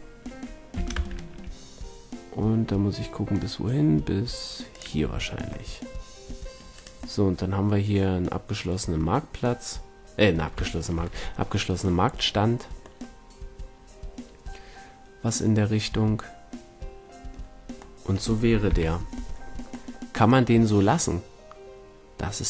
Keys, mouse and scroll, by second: 0.5 middle click, 0.7 g, 4.9 a, 6.7-14.9 middle drag, 17.5-18.6 middle drag, 18.6 KP_5, 19.7-21.3 middle drag, 21.7 middle click.